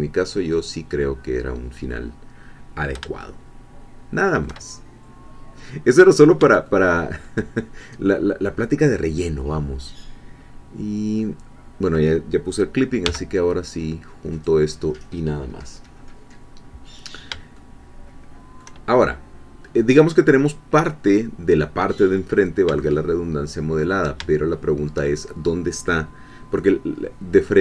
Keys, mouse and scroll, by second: 0.5 click, 3.2 shift+middle click, 4.0-5.0 shift+drag, 5.0 shift+scroll down 1, 5.6-6.1 scroll down 2, 6.1 scroll up 2, 6.7-7.8 shift+drag, 13.0 g, 14.3 click, 16.7-17.3 scroll down 2, 17.6-19.0 shift+middle drag, 19.0-19.6 shift+scroll down 3, 19.6 scroll up 2, 22.2-22.6 scroll down 2, 22.8 shift+middle click, 23.4 shift+click, 24.3 shift+click, 24.4 shift+middle click, 26.7-27.6 scroll up 2.